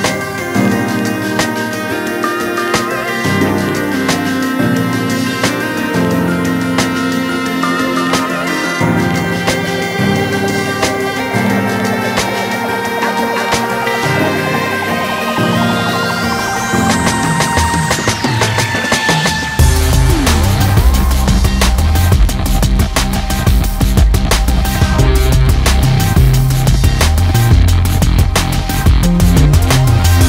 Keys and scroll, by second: 3.5-6.3 typing.